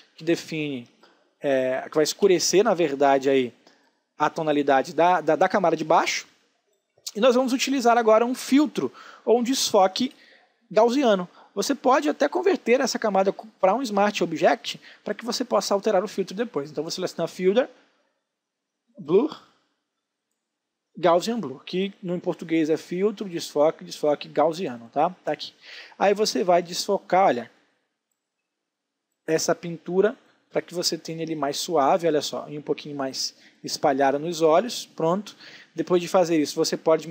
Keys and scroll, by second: 6.1 space.